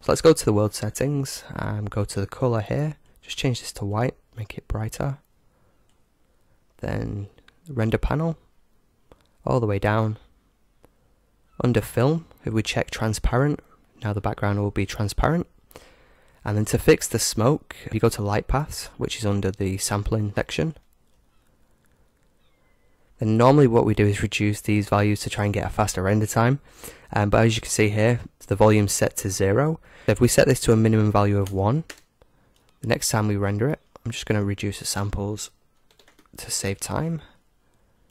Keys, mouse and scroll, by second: 1.0-4.8 drag, 7.9-9.8 drag, 9.6-12.0 middle drag, 13.2-15.0 drag, 20.6-23.4 drag, 21.4 middle click, 22.5-24.8 middle drag, 32.5-34.9 middle drag, 32.5-33.9 scroll up 1, 34.9-36.8 drag, 36.8-38.1 middle drag, 36.8-37.5 scroll up 1, 37.5-38.1 scroll up 1.